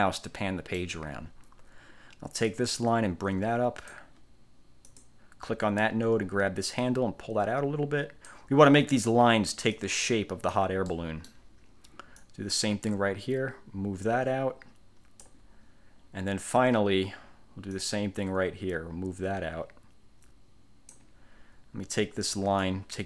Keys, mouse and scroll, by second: 2.6-4.2 drag, 5.0 click, 6.9-8.6 drag, 9.9 click, 11.0 click, 12.3-15.5 drag, 15.7-16.0 scroll down 1, 16.4-16.9 scroll down 1, 17.9-21.2 drag, 22.8-23.0 drag.